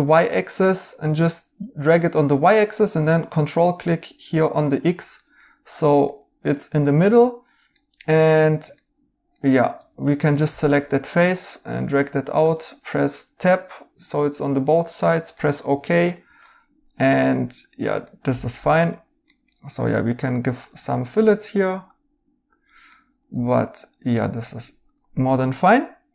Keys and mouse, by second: 5.1 right click, 7.7 right click, 10.3 3, 12.3 q, 12.6 right click, 15.3 right click, 15.7-18.0 typing, 18.7 right click, 20.8 right click, 22.8 right click, 24.1 right click, 24.4 2, 25.1 2, 25.4 right click.